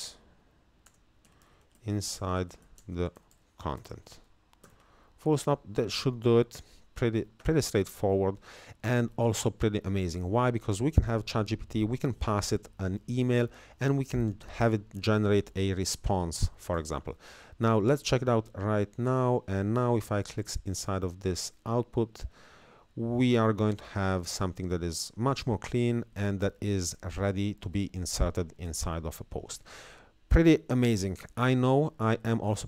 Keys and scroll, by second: 0.0-4.3 typing.